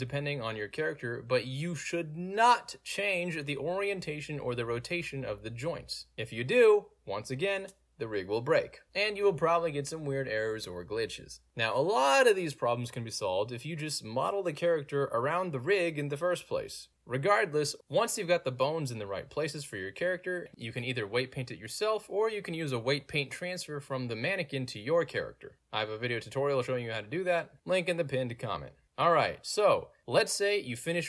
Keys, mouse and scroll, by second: 1.0 ctrl+z, 1.4 End, 1.5 click, 2.1 r, 4.3 Escape, 5.3 click, 5.9 r, 11.4 alt+click, 12.2 alt+click, 12.8-13.9 alt+drag, 14.0-14.3 alt+right drag, 14.4-15.4 alt+drag, 15.9-16.6 alt+drag, 16.8 alt+right drag, 18.1 alt+drag, 18.4 alt+right drag, 18.9 alt+drag, 20.5 middle click, 21.8 alt+click, 22.5 middle click, 22.5 scroll up 2, 22.8 shift+middle click, 23.3 shift+middle click, 23.3-25.6 scroll up 2, 25.6 click, 30.9 click.